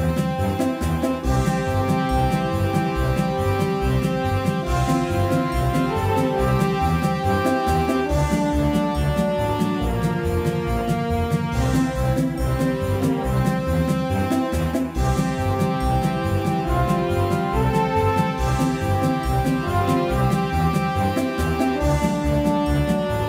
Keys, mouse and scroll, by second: 1.2 middle click, 2.0 middle click, 9.4-14.4 drag, 16.6-23.2 drag.